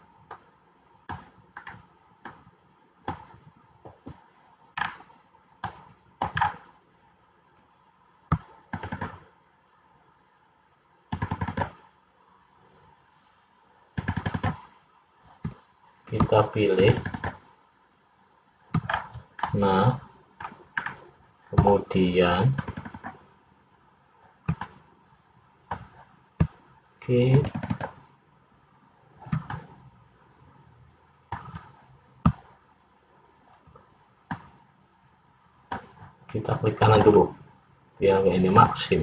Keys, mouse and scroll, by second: 0.5 middle click, 1.7-2.0 scroll up 2, 2.4 middle click, 5.0 scroll up 1, 5.8 middle click, 6.5 scroll down 2, 9.8-19.1 shift+click, 19.1-19.6 scroll down 2, 19.6 middle click, 20.9-21.8 scroll up 2, 22.7 shift+click, 24.0 shift+click, 24.7 middle click, 27.5 shift+click, 29.7 shift+click, 29.7 middle click, 34.5 middle click, 36.9 right click.